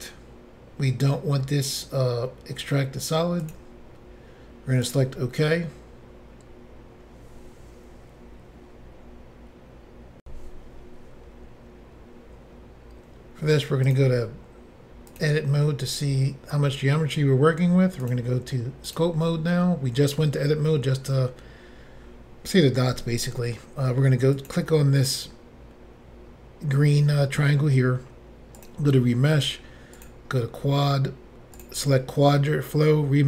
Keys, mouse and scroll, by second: 3.4 click, 4.9 click, 10.2 Insert, 13.9 click, 15.1 click, 15.9 scroll up 3, 18.1 click, 18.1 click, 18.9 click, 19.0 click, 24.4 click, 24.5 click, 28.6 click, 28.7 click, 29.1 scroll down 1, 30.0 click, 30.0 scroll down 1, 30.5 scroll down 2, 31.6 click, 32.2-32.9 scroll down 1, 33.0 scroll down 1.